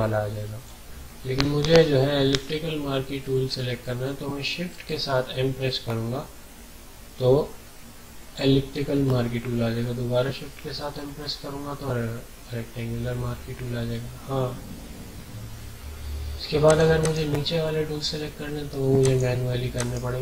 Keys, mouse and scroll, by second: 4.3 m, 8.7 shift+m, 16.6 click, 17.0 right click, 19.0 click, 19.7 right click.